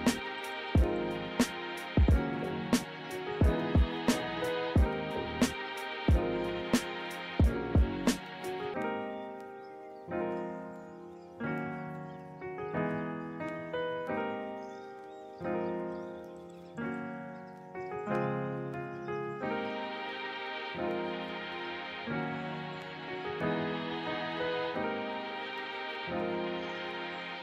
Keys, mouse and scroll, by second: 0.9 ctrl+z, 1.6 ctrl+z, 1.9 ctrl+-, 3.9 ctrl+z.